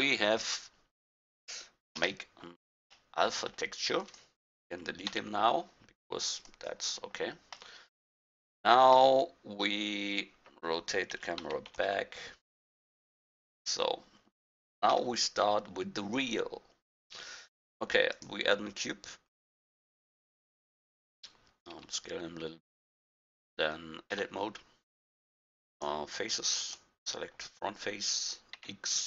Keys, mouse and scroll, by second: 2.0 KP_0, 4.0 right click, 5.1 x, 7.8-8.5 middle drag, 8.5-11.1 right drag, 11.1 r, 13.3-15.5 drag, 14.9 KP_1, 15.5 middle click, 21.7 s, 24.1 Tab, 25.7-28.6 drag, 28.6 x.